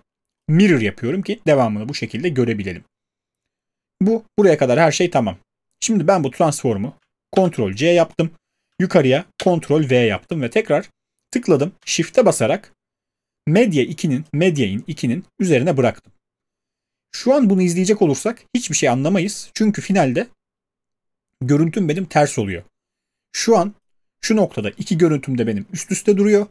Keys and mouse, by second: 8.7 ctrl+c, 9.3 ctrl+v.